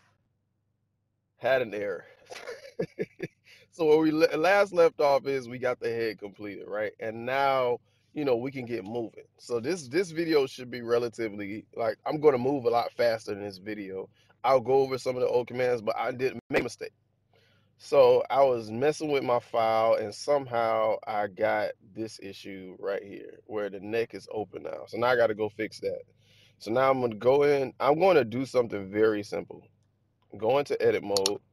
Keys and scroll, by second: 29.6 Tab.